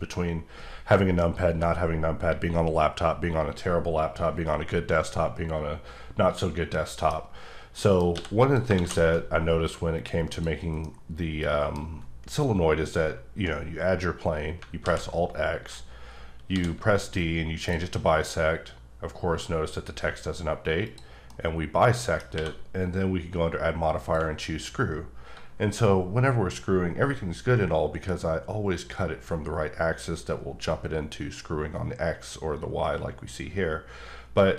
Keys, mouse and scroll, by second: 7.8 middle click, 8.1 x, 8.4 click, 8.8 shift+z, 9.6 click, 10.8 middle click, 12.4-12.8 scroll up 1, 12.8 scroll down 1, 14.8 alt+x, 16.5 d, 17.6 click, 20.8 click, 21.3 middle click, 22.3 q, 24.0 click.